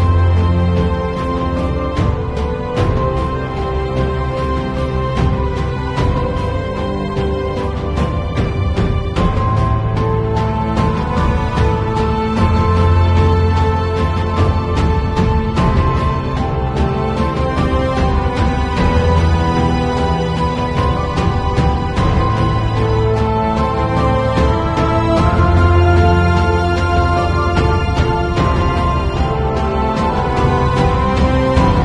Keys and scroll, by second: 16.9 b, 19.0 ], 20.5-23.5 typing, 24.6 ], 25.8 space, 26.8 space, 27.9 [, 29.1 ], 29.6 ], 30.1 [, 31.3 ].